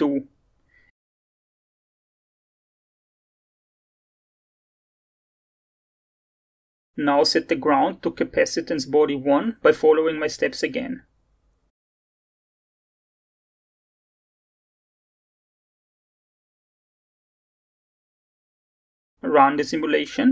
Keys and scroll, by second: 3.7-4.2 typing, 5.9 2, 13.0 g, 13.2 n, 13.2 d, 18.0 1.